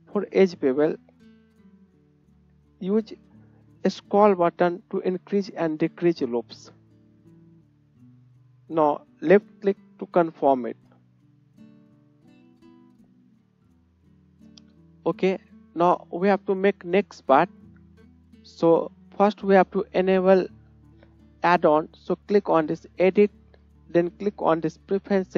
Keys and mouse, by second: 11.4 click, 11.4 middle click, 12.7 Tab, 14.1-14.7 shift+right drag, 15.7-16.3 shift+right drag, 18.1-22.3 right drag, 22.3 click, 25.2 click, 25.2 middle click, 25.2 right click.